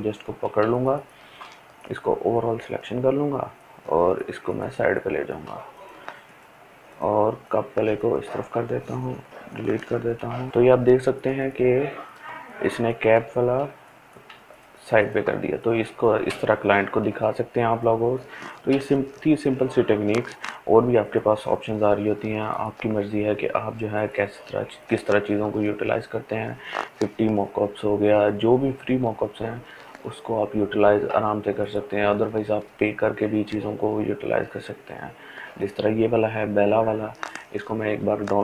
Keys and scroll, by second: 8.8 Delete.